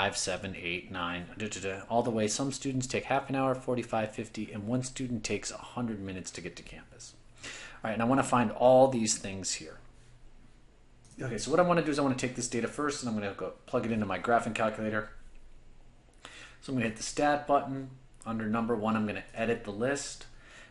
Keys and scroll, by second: 19.4 Return.